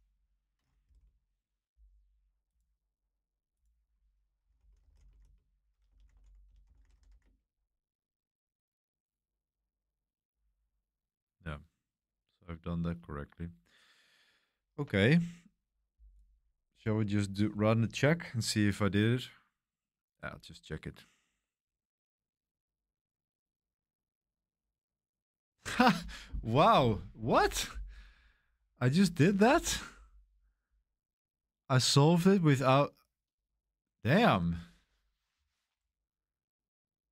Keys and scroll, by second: 0.5-1.3 typing, 4.1-7.7 typing.